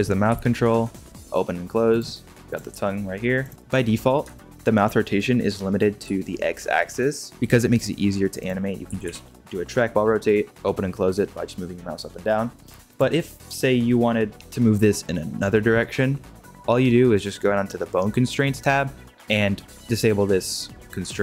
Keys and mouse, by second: 0.2 r, 2.7 r, 3.5 alt+r, 4.3 shift+middle drag, 6.0 r, 8.8 r, 14.3 g, 21.1 click.